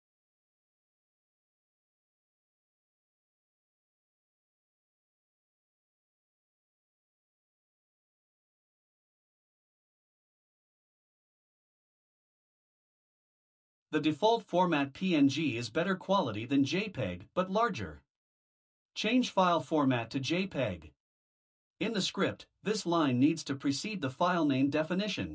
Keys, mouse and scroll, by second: 0.0 click, 10.8 click, 16.5 click, 23.2 click, 24.7 ctrl+c.